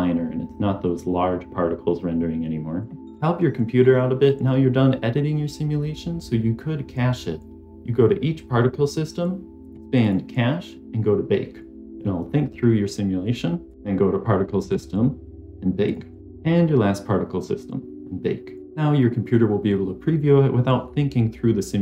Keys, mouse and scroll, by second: 0.8-3.0 drag, 9.5 click, 10.0 click, 13.6 click, 14.6 click, 15.8 click, 18.6 click.